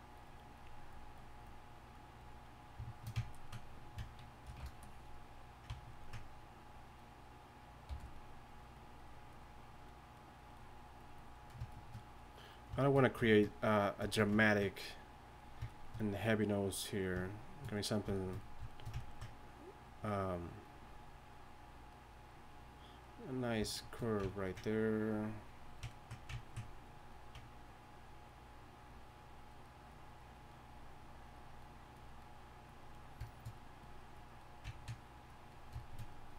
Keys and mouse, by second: 4.4 shift+b, 7.9 f, 13.0-13.7 drag, 16.0-16.9 drag, 30.6-33.5 drag, 34.4-36.1 drag.